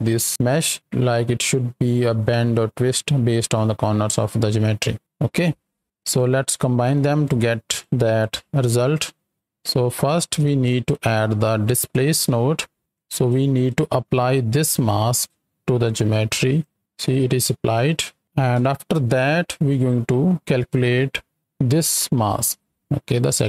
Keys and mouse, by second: 4.7 right click, 5.9 ctrl+click, 7.2 click, 8.2 click, 8.9 middle click, 10.4 shift+a, 12.9 drag, 13.6 click, 14.5 click, 14.8 click, 15.8-16.6 drag, 17.4-18.2 middle drag, 18.5 KP_7, 20.9 right click, 23.2 ctrl+shift+click.